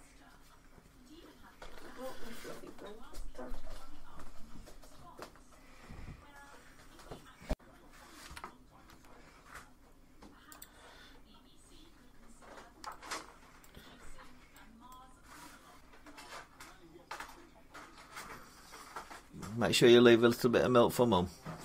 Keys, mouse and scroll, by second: 8.0-8.7 typing, 10.4 click, 10.9 z, 10.9-11.3 scroll, 13.5-13.9 shift+middle click, 14.7 middle click, 15.0 scroll down 3.